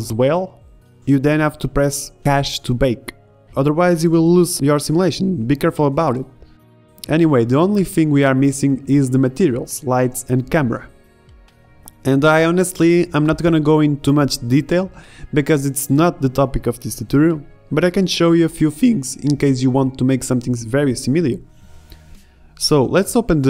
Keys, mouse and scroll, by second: 2.4 alt+a, 3.1 shift+Left, 4.7 alt+a, 20.7 middle click, 21.5 alt+a, 22.2 middle click, 23.3 click.